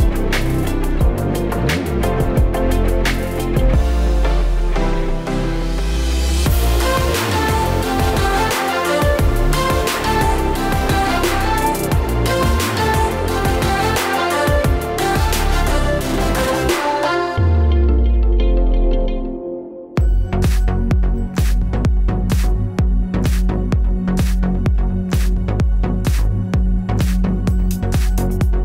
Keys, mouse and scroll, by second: 0.3 s, 0.9 click, 1.6 click, 2.2 click, 3.3 shift+d, 4.0 click, 4.7 Tab, 5.1-6.0 typing, 6.8 Tab, 7.8 s, 8.2 click, 8.8 s, 9.7 click, 10.2 s, 11.2 click, 12.4 click, 12.8 click, 13.2 click, 14.4 click, 15.4 click, 16.2 middle click, 17.3 click, 17.8 click, 18.0 click, 18.6 click, 19.3 click, 19.5 click, 20.2 click, 20.7 click, 22.4 click, 22.8 click, 23.4 middle click, 24.5-24.8 scroll down 6, 26.3-26.7 scroll up 9, 26.7 click, 27.2 shift+click, 28.5-28.6 scroll down 2.